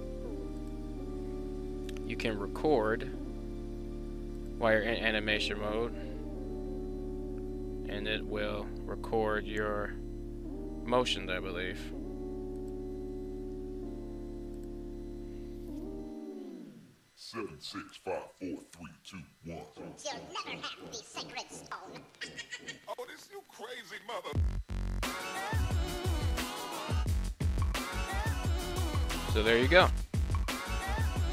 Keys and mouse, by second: 4.2 click, 5.0 space, 5.4 r, 5.6 r, 12.4 click, 13.2 space, 14.4 click, 17.1-19.5 drag, 20.7 click, 21.4 space, 29.0 space, 31.1 click.